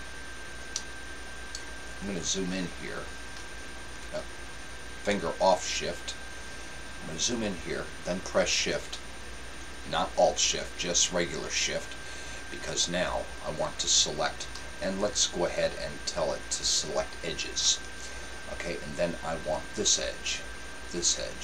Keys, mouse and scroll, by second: 2.2-2.9 scroll up 1, 2.9-5.0 middle drag, 5.2-8.1 middle drag, 11.5-14.8 right drag, 16.4-18.1 drag, 19.6-21.4 right drag.